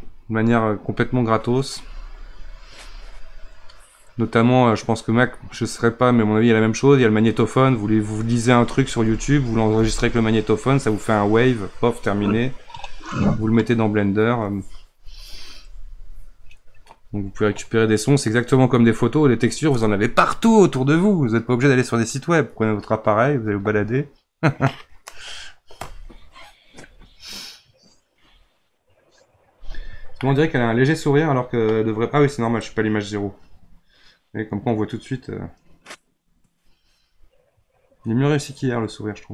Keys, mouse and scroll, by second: 29.8-30.2 scroll up 1, 30.2-32.6 middle drag, 32.6-35.6 drag.